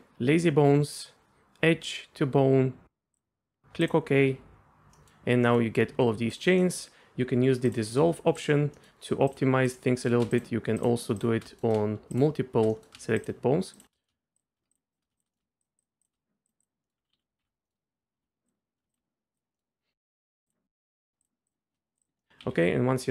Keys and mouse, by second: 4.9 middle click, 5.4 middle click, 6.3 click, 6.6 middle click, 8.4 click, 8.7 middle drag, 10.0 middle click, 11.5 middle click, 12.7 middle click, 14.0 middle click, 14.9 shift+drag, 15.3 middle drag, 15.8 shift+drag, 16.4 click, 16.6 click, 17.1 ctrl+z, 17.4 ctrl+z, 17.7 click, 19.3 click, 19.5 middle click, 19.9 alt+a, 20.2 middle click, 20.5-21.1 drag, 21.9 click, 22.2 middle click, 22.4 a.